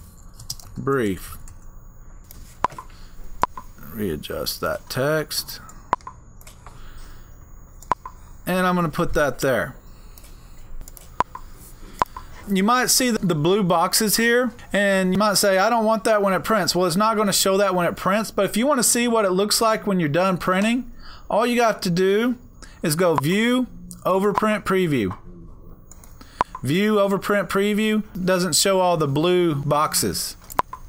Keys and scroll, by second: 0.0-2.0 typing, 10.8 Right.